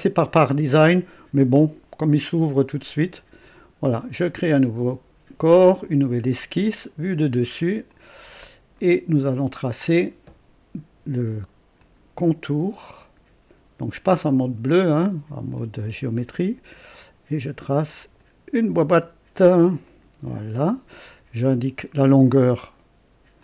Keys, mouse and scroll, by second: 3.5 click, 5.7 click, 7.0 click, 7.9 click, 8.7-10.0 right drag, 11.7 click, 15.5 click, 18.1 click, 19.8 click, 20.5 right click, 21.9 click, 23.3 click.